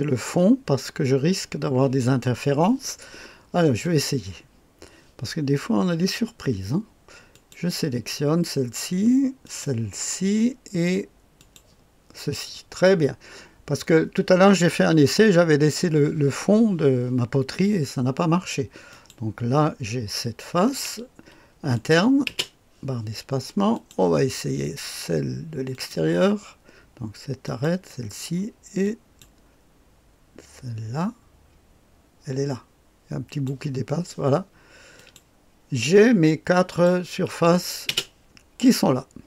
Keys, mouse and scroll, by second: 3.8 click, 7.3 click, 9.4 click, 11.3 click, 18.9 click, 21.7 click, 22.2 space, 23.7 click, 25.7 click, 27.4 click, 28.8 click, 33.3 click, 34.9 click, 36.6 click, 37.9 space.